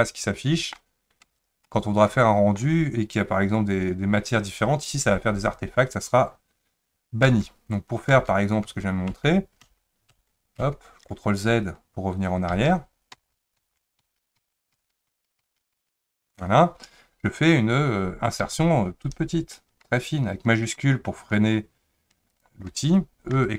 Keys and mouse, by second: 1.2 Tab, 1.6-2.6 middle drag, 7.3 Tab, 8.1 Tab, 8.7 Tab, 9.1 Tab, 9.6 Tab, 10.1 Tab, 10.6 Tab, 12.5 ctrl+z, 13.1 ctrl+z, 13.6 ctrl+z, 14.0 ctrl+z, 14.4 ctrl+z, 14.7 ctrl+z, 15.1 ctrl+z, 15.4 ctrl+z, 15.7 ctrl+z, 18.5 i, 23.3 e.